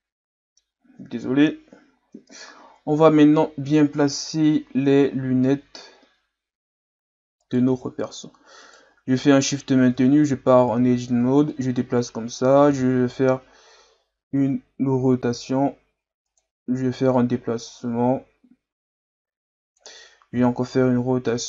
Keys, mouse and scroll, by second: 1.2 KP_3, 2.4-3.1 ctrl+scroll up 2, 3.1-3.6 scroll up 2, 7.4 right click, 8.6 shift+right click, 9.9 Tab, 10.3 a, 10.5 a, 11.5-12.7 drag, 12.7 r, 17.1-20.2 drag, 20.3 r.